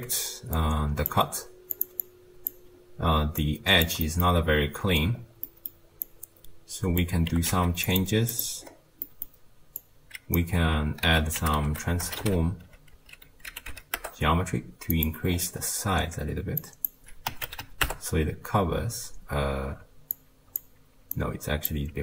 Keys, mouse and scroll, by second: 0.6 click, 1.8 click, 2.0 click, 2.7-3.4 scroll down 2, 3.4 click, 4.1 middle click, 4.5-5.2 scroll down 4, 5.2 scroll down 3, 5.5-6.1 middle drag, 6.1 click, 7.3 g, 8.4 click, 8.6-9.1 scroll up 1, 9.1-9.8 middle drag, 9.8 click, 11.1 ctrl+a, 15.3-16.6 scroll up 6, 16.6-19.4 drag, 19.4-20.2 scroll down 3, 20.2 click, 21.2 click.